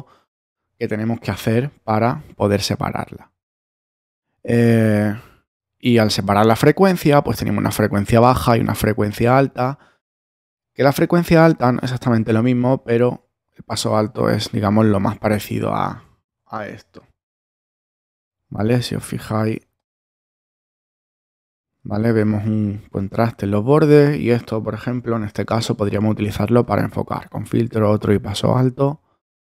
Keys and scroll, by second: 19.5 space.